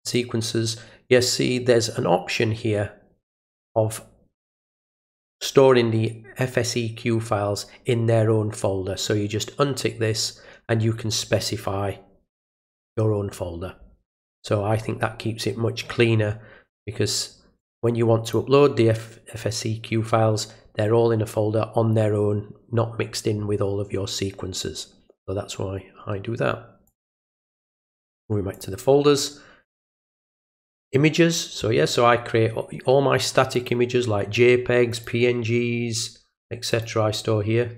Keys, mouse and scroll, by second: 0.0 click, 17.6 click, 26.9 click, 28.5 click, 30.0 click, 30.2 click, 33.6 click, 34.9 click, 36.7 click.